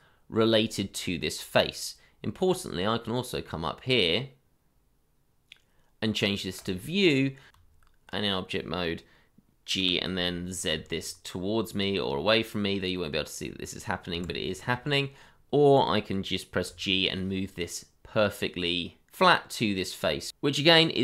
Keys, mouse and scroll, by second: 0.8-2.5 scroll up 1, 7.5 Tab, 9.8 g, 10.7 z, 14.1 Escape, 15.0-16.0 scroll down 1, 16.6 g.